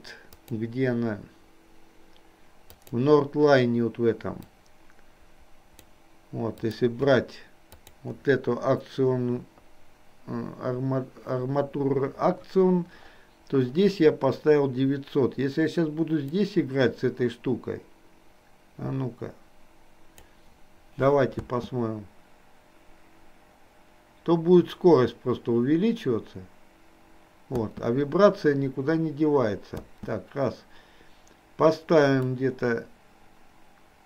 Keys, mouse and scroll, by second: 2.9 click, 4.8-6.2 drag, 16.4-20.2 drag, 32.3-34.0 drag, 32.3 space.